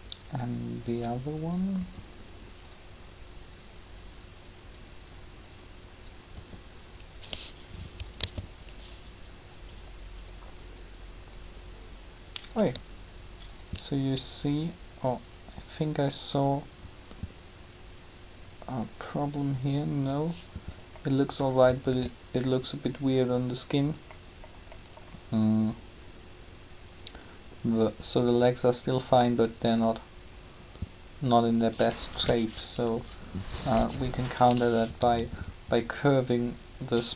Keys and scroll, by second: 1.8 r, 6.3 r, 8.2 alt+a, 21.8 alt+a, 32.6 Up.